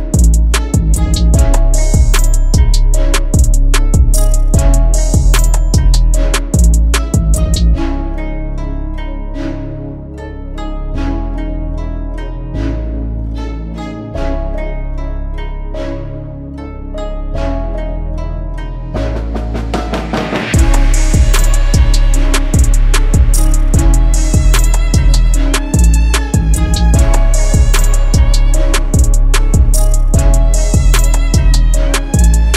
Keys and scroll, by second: 26.1 0, 26.7 2, 30.7 ctrl+z.